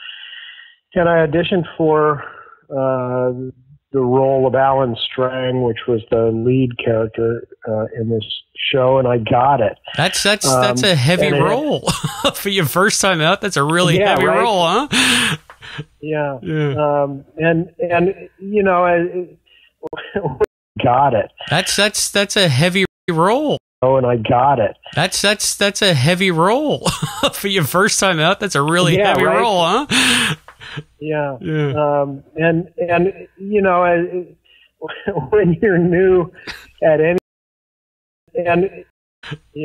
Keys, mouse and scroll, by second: 1.1 click, 10.5-14.6 drag, 15.4 click, 16.3 click, 18.1-19.6 drag, 19.8 Delete, 20.4 space, 20.6 click, 20.7 space, 21.2-22.7 drag, 22.7 space, 23.0 space, 23.1 click, 23.5 space, 23.6 click, 23.7 space, 26.3 click, 27.2 click, 33.9-37.1 drag, 37.1 space, 38.0 ctrl+shift+Delete, 38.2 space, 38.8 space, 39.1 click, 39.1 space.